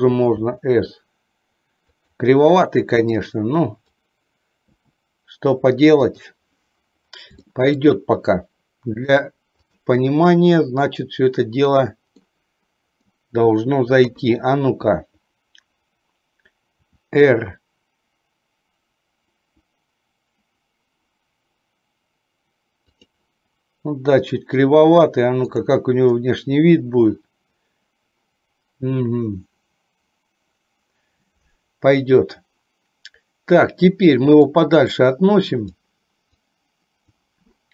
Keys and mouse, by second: 0.4 s, 3.3 click, 4.8 s, 7.5 shift+middle click, 9.2 click, 12.3 middle click, 14.2 KP_3, 16.8 r, 34.7-35.9 drag, 36.4 click.